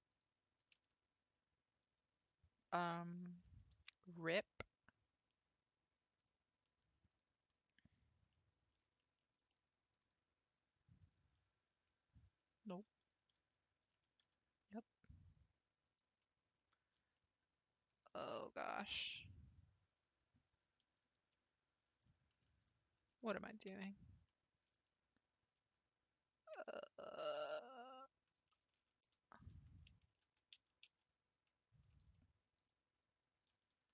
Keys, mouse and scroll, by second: 0.1 click, 0.8 g, 3.7 ctrl+v, 8.3-11.1 middle drag, 11.1 click, 12.2 shift+click, 13.1 shift+click, 13.8 shift+click, 14.3 f, 14.8 middle click, 15.5 scroll down 1, 16.2-18.2 middle drag, 18.2-18.7 scroll up 2, 18.7-23.4 shift+middle drag, 23.4 ctrl+z, 23.8 ctrl+z, 24.3-25.6 middle drag, 25.6 ctrl+z, 26.7-29.7 middle drag, 30.3 ctrl+z, 30.6 ctrl+z, 30.9 ctrl+z, 32.1-33.9 middle drag.